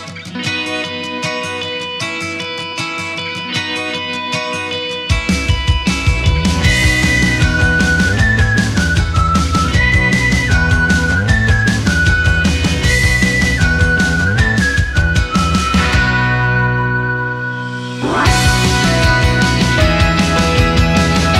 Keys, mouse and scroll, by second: 0.3 click, 1.2-2.5 drag, 2.8-3.1 scroll down 2, 4.2 click, 5.1 click, 6.4-7.0 drag, 9.2 BackSpace, 9.4 BackSpace, 9.6 BackSpace, 12.8 k, 13.6 o, 13.8 p, 15.4 space, 16.2 e, 16.3 e, 17.2 Return, 18.0 l, 18.6 w, 18.7 a, 18.9 k.